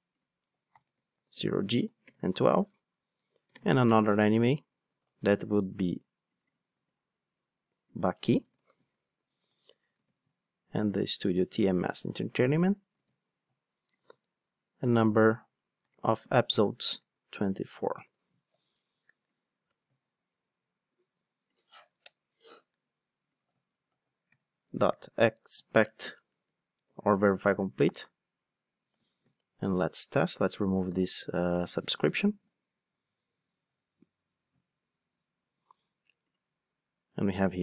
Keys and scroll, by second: 1.2 super+v, 4.1 ctrl+space, 4.6 Return, 6.7 super+c, 8.6 super+v, 13.0 super+c, 14.0 super+v, 27.9 Return, 30.8 super+/, 32.3 ctrl+shift+d.